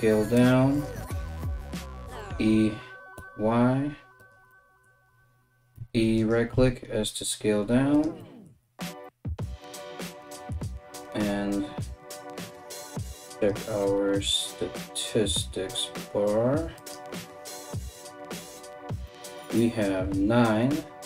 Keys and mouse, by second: 1.8 e, 5.3 e, 6.1 s, 12.0 click, 13.4-21.0 drag.